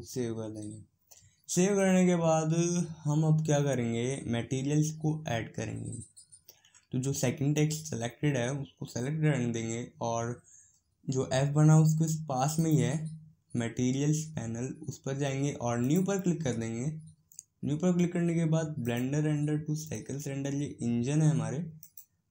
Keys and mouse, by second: 0.0-1.4 drag, 12.5-17.6 drag, 18.8-20.6 drag.